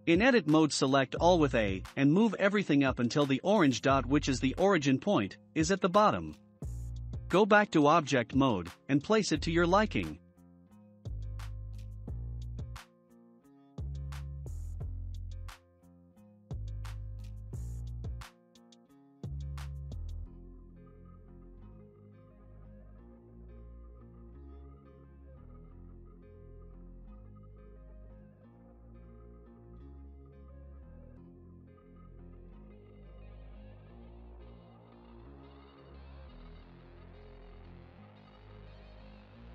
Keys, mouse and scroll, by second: 1.5-4.5 drag, 5.3 Tab, 6.0 scroll down 1, 6.6-8.6 shift+middle drag, 6.6 scroll down 2, 9.8 click, 11.9-12.4 scroll down 5, 12.4-13.9 shift+middle drag, 13.9 scroll down 1, 14.5-15.6 drag, 15.6-16.6 middle drag, 20.6 click, 21.9-22.4 scroll down 2, 22.4-23.6 shift+middle drag, 23.6-24.4 scroll up 4, 24.5 click, 25.6 s, 28.9 click, 29.6-30.7 shift+middle drag, 30.7-32.2 drag, 32.3-34.2 shift+middle drag, 34.2 click, 35.1-35.5 scroll down 4, 35.5-36.5 shift+middle drag, 36.5 scroll up 1, 37.2 scroll up 2, 37.2-37.6 middle drag, 37.6 scroll down 1, 38.0-39.5 shift+middle drag.